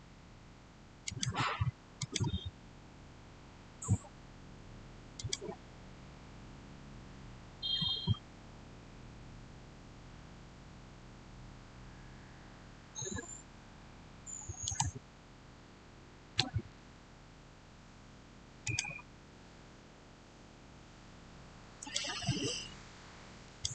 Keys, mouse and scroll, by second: 0.9 click, 5.0 click, 14.5 right click, 18.5 click, 21.6 click, 21.7 click.